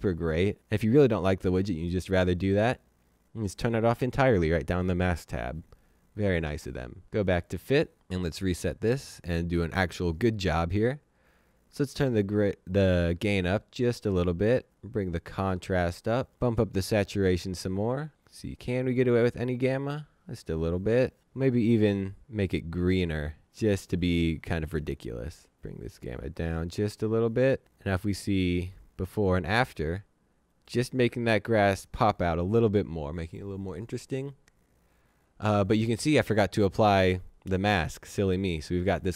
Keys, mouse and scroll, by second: 3.1 click, 7.1 click, 8.1 click, 11.5 click, 19.1 click, 20.4 click, 21.3 click, 24.8 click, 25.6 click, 28.5 click.